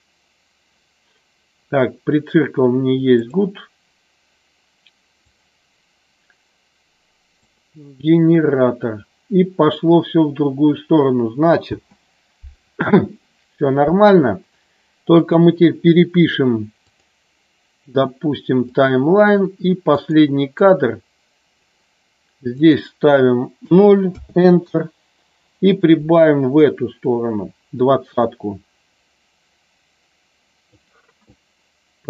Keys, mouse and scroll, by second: 3.1 click, 5.2-7.6 drag, 11.7 space, 15.3 click, 17.0-18.8 drag, 19.9 click, 20.6 click, 22.4-24.8 drag, 25.8-30.7 drag.